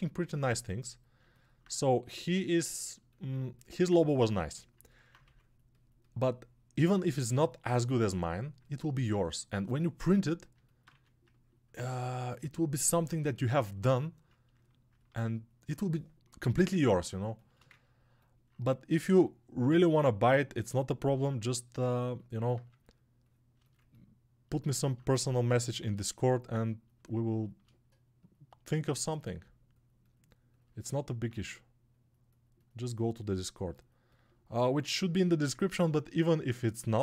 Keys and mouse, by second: 1.5-8.1 shift+right drag, 8.1-37.0 alt+drag.